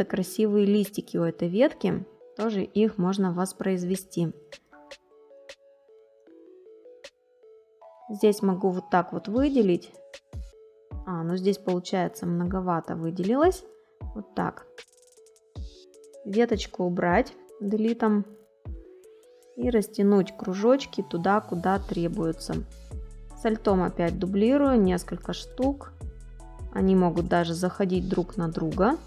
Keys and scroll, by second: 4.6 space, 9.5 ctrl+z, 16.2 Delete.